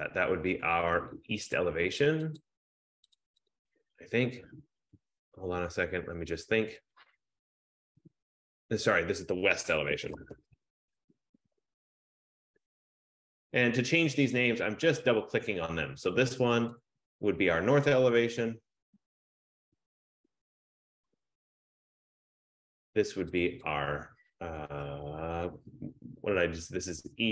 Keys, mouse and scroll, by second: 1.7 click, 2.1 F15, 2.5 click, 3.3 click, 3.6 click, 9.9-12.9 typing, 10.0 click, 14.4 click, 16.3 click, 16.8 click, 18.0 click, 18.4 click, 18.9-21.4 typing, 22.5 click, 23.5 click, 23.7 click.